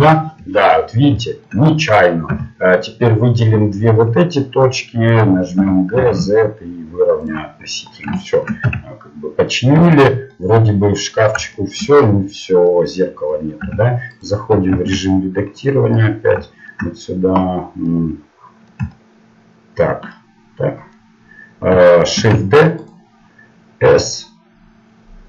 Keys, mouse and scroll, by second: 2.3 a, 2.7-4.8 drag, 5.6 g, 7.5 middle click, 8.6 Tab, 9.7 z, 11.2 middle click, 13.6 Tab, 15.7 ctrl+Tab, 16.5-17.8 drag, 16.5-17.8 right drag, 18.0-20.8 middle drag, 22.2 shift+d, 23.9 s.